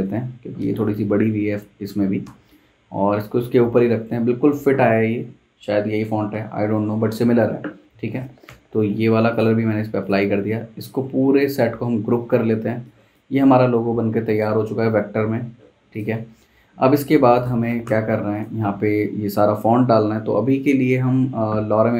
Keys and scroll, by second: 0.9 Escape, 1.5 Escape, 2.2 v, 8.5 i, 11.1 super+z, 11.6 super+g, 13.4 super+z, 17.8 t, 21.3 Escape.